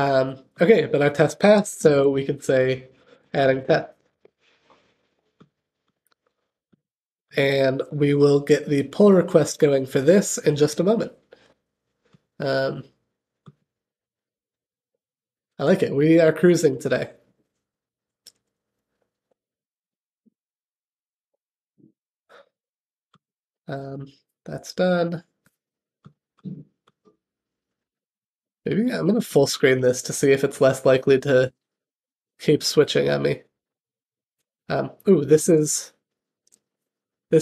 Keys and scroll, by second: 1.4 super+k, 7.1 alt+super+k.